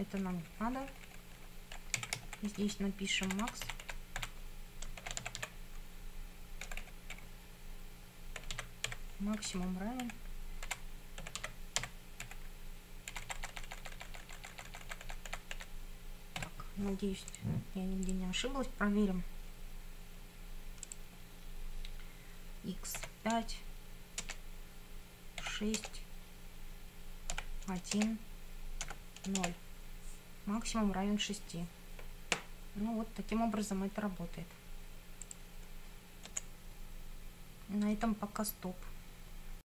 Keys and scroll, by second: 0.2 BackSpace, 2.0 Down, 2.2 Right, 2.5 Left, 3.3 Delete, 4.8-6.7 typing, 8.2-9.4 typing, 9.4 Right, 10.7 Delete, 11.0-12.3 typing, 13.1 Delete, 16.4 BackSpace, 23.0 5, 24.2 Return, 25.4 6, 25.8 Return, 27.4 1, 28.0 Return, 28.9 0, 29.4 Return, 36.4 F9.